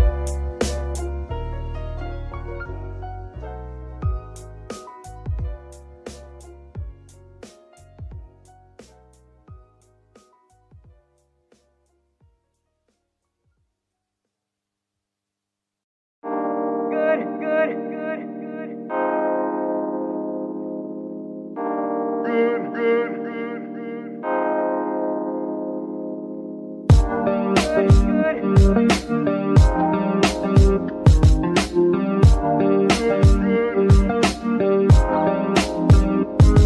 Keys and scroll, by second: 13.0 Return, 13.9 KP_3, 19.2 Tab, 19.9 s, 22.3 Tab, 22.9 s, 26.1 g, 26.3 y, 32.0 F2, 33.0-33.7 typing, 33.9 Return.